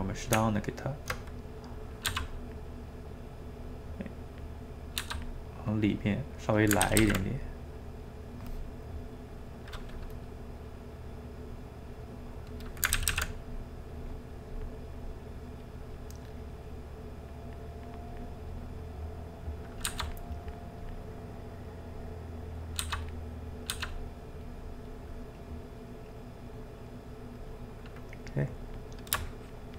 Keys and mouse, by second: 0.0 click, 0.1 middle click, 0.3 Tab, 1.3 middle click, 2.1 f, 2.4 middle click, 2.9-4.7 drag, 4.7 middle click, 5.0 f, 5.4 middle click, 5.8 click, 6.3 middle click, 6.8 ctrl+z, 7.0 ctrl+z, 7.2 middle click, 7.8 click, 8.2-9.2 middle drag, 9.2 click, 9.5-10.7 middle drag, 10.7 click, 11.3 middle click, 11.9-13.0 drag, 13.0 ctrl+z, 13.1 ctrl+z, 13.5-14.9 drag, 14.9 middle click, 15.8 click, 16.1 middle click, 16.6-18.5 drag, 18.5 middle click, 19.4 click, 19.9 f, 20.4 click, 21.1 middle click, 21.9 click, 22.8 f, 23.4 middle click, 23.7 f, 24.1 middle click, 24.4 click, 25.2-26.8 middle drag, 26.8 click, 27.7 middle click, 28.2-29.7 drag.